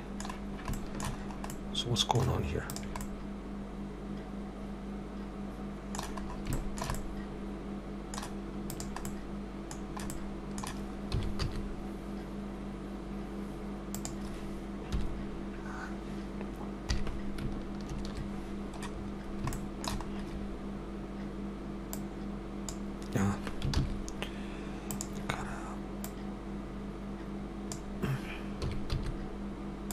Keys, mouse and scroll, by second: 0.3 scroll down 2, 0.8 shift+middle click, 1.1-1.4 scroll up 2, 1.5 middle click, 2.6 click, 3.0 middle click, 6.3 scroll up 2, 6.5 shift+middle click, 7.0 middle click, 8.6 click, 9.1 middle click, 11.1 s, 14.9 KP_1, 16.8 KP_3, 17.9 ctrl+KP_3, 19.0-19.5 scroll up 3, 19.5 shift+middle click, 20.1-20.5 scroll up 2, 22.0 click, 23.8 ctrl+z, 24.9 click, 26.1 click, 28.6 s.